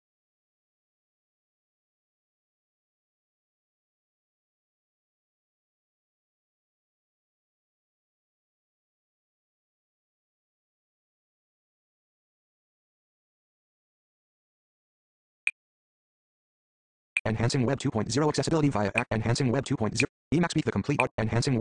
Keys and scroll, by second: 11.6 Page_Down, 12.3 Page_Down, 15.3 Page_Down, 16.2 Page_Down, 17.0 Page_Down, 18.8 Page_Down, 19.8 Page_Down.